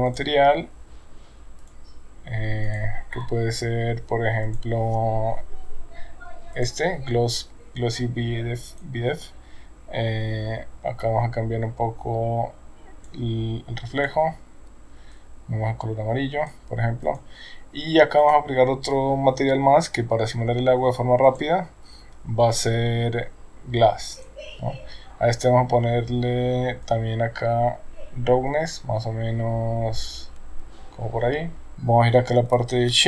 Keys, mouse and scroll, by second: 0.1 click, 2.6 click, 4.5 click, 8.8 click, 11.0-13.2 drag, 14.0 click, 17.0 click, 18.3 click, 21.3 click, 26.9-31.7 drag.